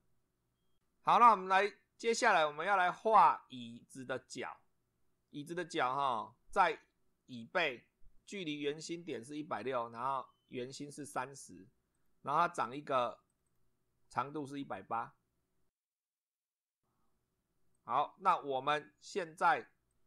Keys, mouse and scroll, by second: 2.7-5.9 middle drag, 12.0 click, 13.3 click, 16.2 click, 17.8 click, 19.9 click.